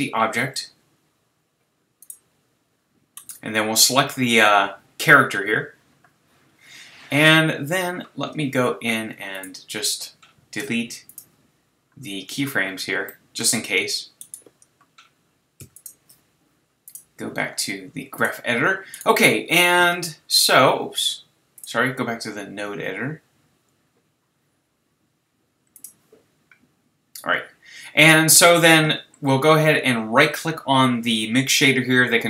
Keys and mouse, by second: 13.6 a, 15.6 x, 18.2-18.8 drag.